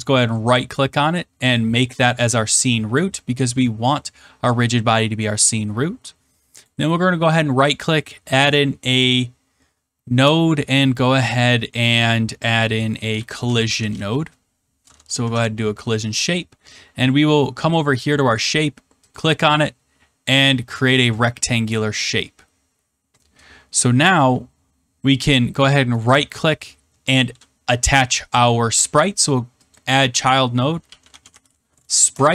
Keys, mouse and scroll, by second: 1.5 click, 6.6 right click, 7.7 click, 12.8-14.4 typing, 15.2 Return, 17.7 click, 19.1 click, 21.1 click, 22.1-22.5 scroll, 23.3-24.3 scroll, 25.9 right click, 29.7 click, 30.7-31.8 typing, 32.0 Return.